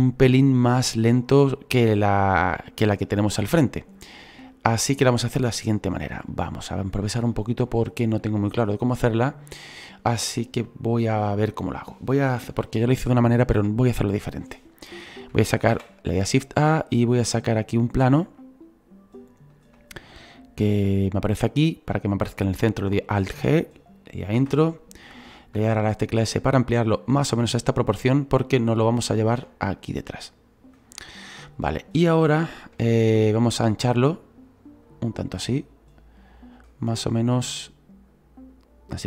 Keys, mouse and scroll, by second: 2.9-12.5 drag, 17.8 shift+a, 23.2 alt+g, 25.6 s, 29.8-34.1 drag, 34.8-36.8 drag, 36.8 scroll down 1, 38.1-39.0 drag.